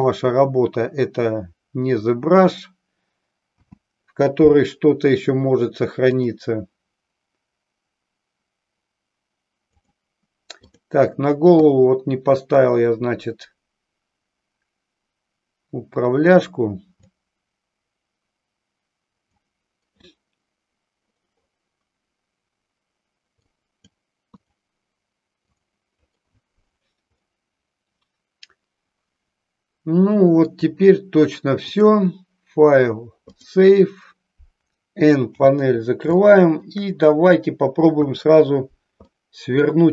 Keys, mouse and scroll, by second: 0.5 click, 3.5 n, 6.1-9.9 drag, 10.7-11.0 drag, 12.5-16.4 drag, 17.0-19.8 drag, 23.4 click, 25.5 click, 27.3-30.6 middle drag, 31.8-33.5 drag, 35.3 n, 36.3 shift+middle click, 38.0 KP_3, 39.0-39.8 middle drag.